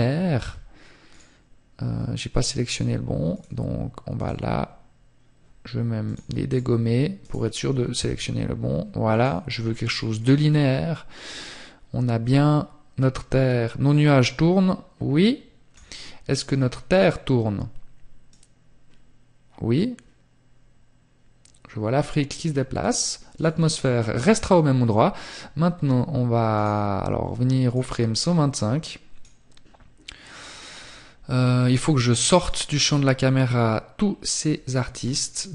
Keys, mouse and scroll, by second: 8.4 click, 26.0 click.